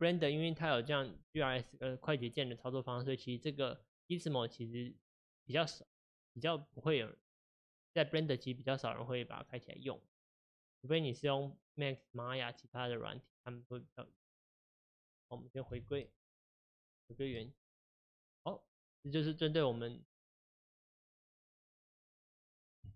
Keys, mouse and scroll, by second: 6.9-13.6 drag, 14.4 click, 14.7 click, 14.9 alt+r, 15.6 click, 15.8 alt+g, 16.5 alt+s, 16.9 click, 17.5-22.9 shift+middle drag.